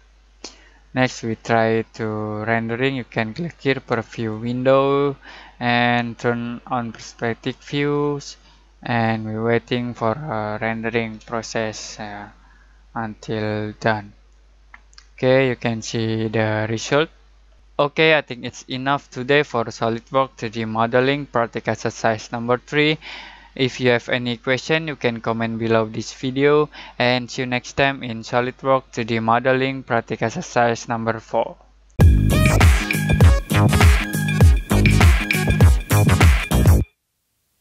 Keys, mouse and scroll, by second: 4.3 click, 4.3 click, 4.3 typing, 7.2 typing, 7.5 click, 8.7 typing.